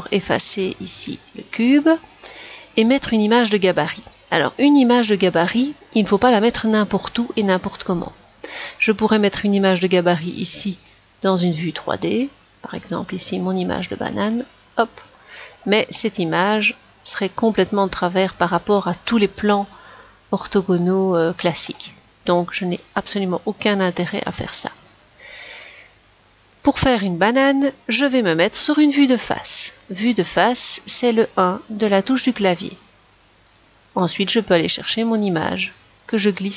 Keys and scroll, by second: 0.0 Delete, 31.1 1.